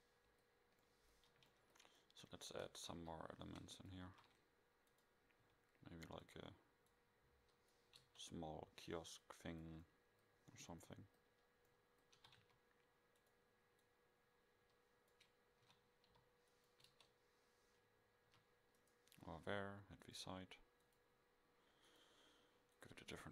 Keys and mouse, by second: 3.0 KP_5, 4.1 shift+a, 5.4 s, 8.0 KP_0, 9.4 click, 9.9 middle drag, 11.5 middle click, 11.9 middle click, 12.2 s, 15.7 s, 16.9 KP_0, 18.3 a.